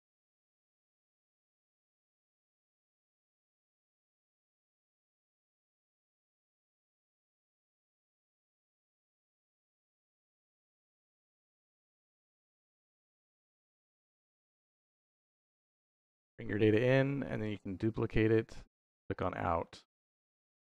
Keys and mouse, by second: 0.0 click, 1.4 shift+d, 3.0 click, 3.3 middle click, 4.1 middle click, 5.1 click, 5.8 middle click, 6.9-7.6 drag, 8.5 click, 9.5-12.8 drag, 13.1-14.9 drag, 17.1 click, 17.6 shift+d, 18.6 click, 18.9 click, 19.5 middle click.